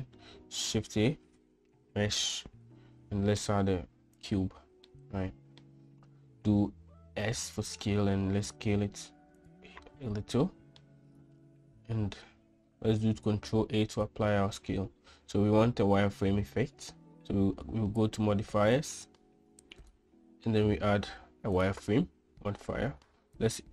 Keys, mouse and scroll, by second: 0.9 shift+a, 4.9-5.7 middle drag, 7.3 s, 10.5-10.9 middle drag, 13.1 ctrl+a, 20.9-22.3 drag, 23.4-23.7 drag.